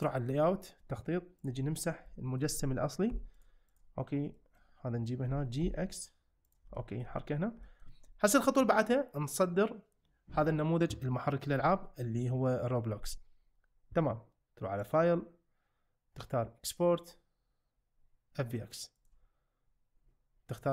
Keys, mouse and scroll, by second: 2.1-2.4 shift+middle drag, 3.1 x, 4.4 shift+middle click, 5.3 g, 5.6 x, 6.7 shift+middle drag, 7.6 shift+middle click, 14.9-19.3 drag.